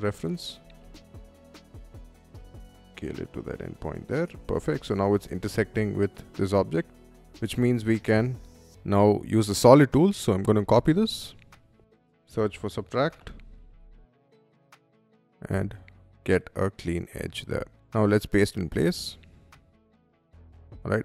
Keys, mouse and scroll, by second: 0.0 click, 0.3 space, 0.6 s, 1.1 click, 2.8 click, 3.2 middle click, 4.1 space, 4.3 middle click, 5.5 click, 5.9-6.9 middle drag, 7.1 shift+middle click, 7.5 shift+middle click, 9.9 click, 10.3 ctrl+c, 10.7 middle click, 11.3 middle click, 11.6 shift+s, 12.5 u, 12.9 b, 13.4 t, 14.1 click, 14.7 click, 15.2 middle click, 15.9 space, 16.8 middle click, 16.8 scroll down 1, 17.4-18.2 right drag, 18.3 click, 19.5 scroll down 1, 20.1 click, 20.5 scroll up 1, 20.8 middle click.